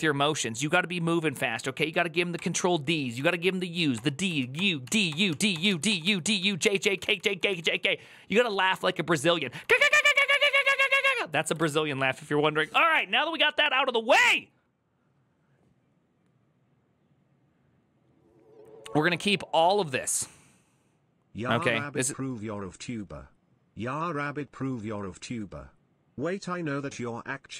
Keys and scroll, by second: 2.9 ctrl+u, 4.3 ctrl+d, 6.5-8.2 typing, 9.4-13.6 typing.